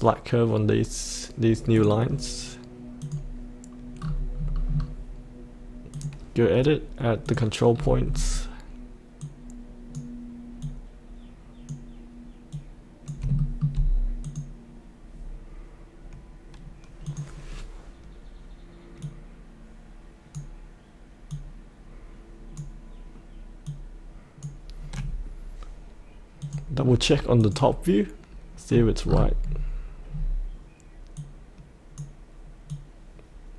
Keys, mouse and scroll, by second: 1.7 click, 2.1-3.0 scroll down 1, 3.0 click, 5.9 click, 7.7-8.3 scroll down 1, 9.2 click, 10.8-13.2 drag, 13.4 shift+middle click, 14.2-25.0 drag, 26.8-27.4 scroll down 1, 27.4 click, 28.7-30.1 scroll down 1, 31.1-33.5 drag.